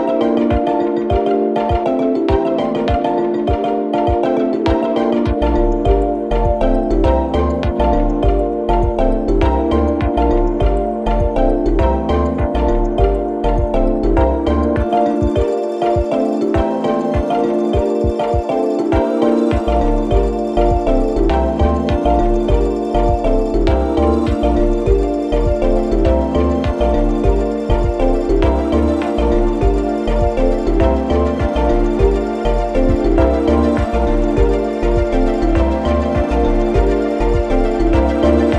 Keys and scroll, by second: 9.2 0, 9.9 Return, 34.3 1, 34.6 Return, 35.5 ., 35.8 1, 35.9 Return, 38.0 space.